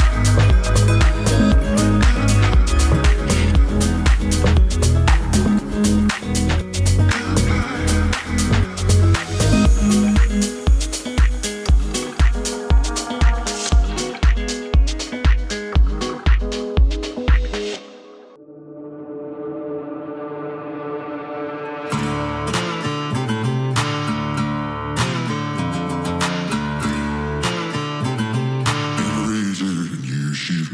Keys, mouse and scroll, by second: 3.7 right click, 4.4-8.4 drag, 10.8 right click, 11.6 click, 12.3-25.1 drag, 25.7-26.6 typing, 27.8-30.7 drag.